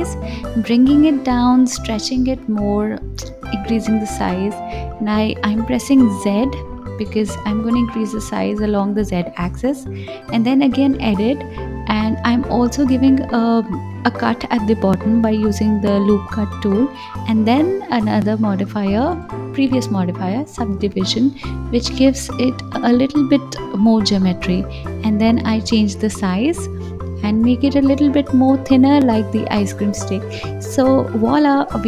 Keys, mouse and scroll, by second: 0.4 s, 2.0 g, 4.9 click, 5.9 ctrl+z, 6.6 s, 11.8 click, 13.8 ctrl+r, 16.8-21.3 drag, 23.2-24.8 drag, 24.8 right click, 26.3 KP_3, 27.4 click, 28.6 ctrl+z, 29.0 s.